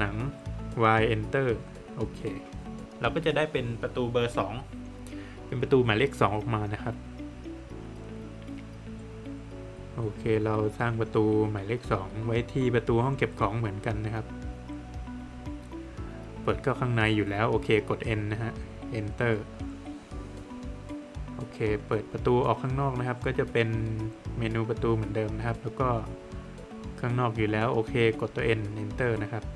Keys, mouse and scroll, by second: 1.5 Return, 3.1 Return, 4.4 middle click, 6.0 middle click, 7.3 middle click, 9.2 click, 10.6 click, 11.7 scroll up 1, 12.7 click, 17.8 Return, 18.5 Return, 19.8 ctrl+z, 22.1 click, 23.8 click, 27.4 Return, 28.3 Return, 29.4 click.